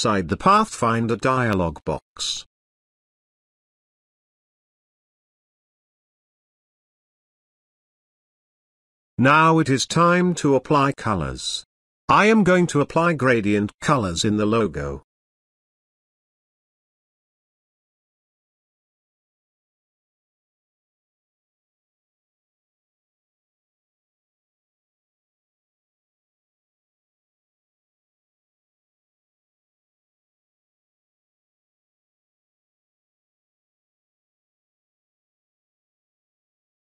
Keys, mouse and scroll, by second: 2.9-5.2 drag, 9.7 click, 15.3 click, 23.4 click, 28.0-28.6 drag, 31.4-33.0 drag, 34.9 g.